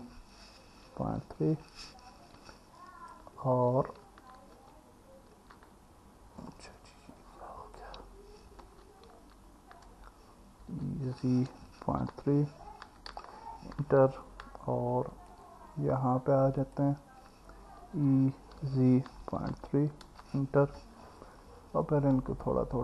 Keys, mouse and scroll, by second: 1.1 KP_Decimal, 1.2 KP_3, 4.5 ctrl+z, 7.1 click, 9.1 ctrl+z, 10.7 e, 11.2 z, 11.9 KP_Decimal, 12.1 KP_3, 14.2-15.3 alt+middle drag, 18.0 e, 18.6 z, 19.3 KP_Decimal, 19.6 KP_3.